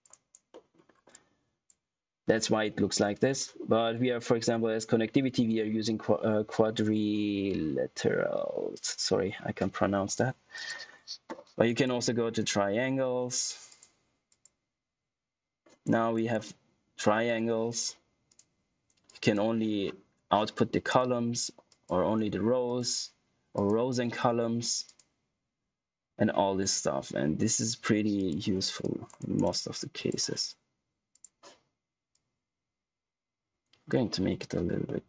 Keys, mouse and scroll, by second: 0.0 right click, 0.4 middle click, 0.8 scroll down 1, 1.0 click, 10.5 click, 13.6 click, 15.8 scroll up 1, 16.1 click, 18.2 click, 19.7-20.8 scroll down 1, 20.8 click, 29.1 right click, 29.4 click, 34.8 middle click.